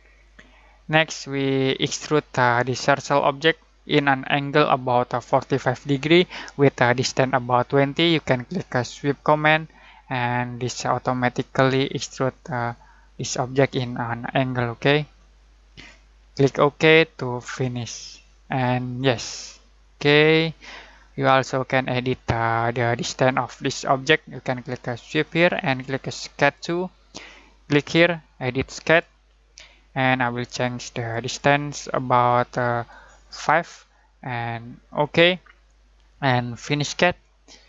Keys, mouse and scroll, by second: 1.1-4.9 middle drag, 9.2 click, 12.5-13.7 scroll up 1, 13.8-17.4 shift+middle drag, 17.4 click, 20.0-25.2 middle drag, 25.2 click, 28.8 click, 34.2 5, 34.8 click.